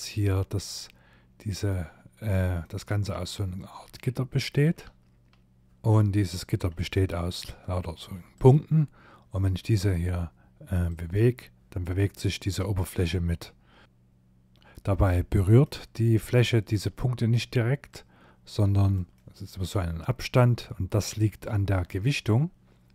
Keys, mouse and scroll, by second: 0.6 click, 1.6 middle click, 2.9 shift+middle click, 7.4 click, 8.4 middle click, 9.9 click, 13.3 shift+middle click, 14.1 middle click, 16.0 middle click, 16.9 click, 18.1 middle click, 19.3 click, 22.3 click.